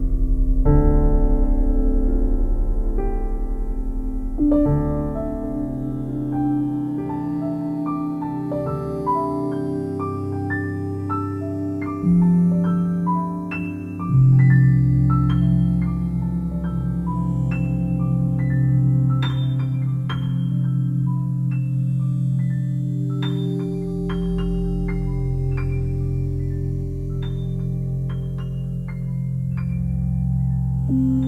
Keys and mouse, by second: 1.6 shift+click, 2.2 shift+click, 3.5 ctrl+z, 4.8 b, 4.9-6.1 drag, 5.9 g, 6.4 z, 10.4 click, 11.0 ctrl+alt+click, 11.9 alt+shift+click, 12.9 ctrl+alt+click, 15.9 click, 17.8 typing, 18.9 typing, 20.4 click, 20.9 click, 21.7-22.0 typing, 23.1 click, 24.0 ctrl+alt+click, 24.6 ctrl+alt+click, 25.8-29.2 ctrl+alt+drag, 28.1 typing, 30.6 click.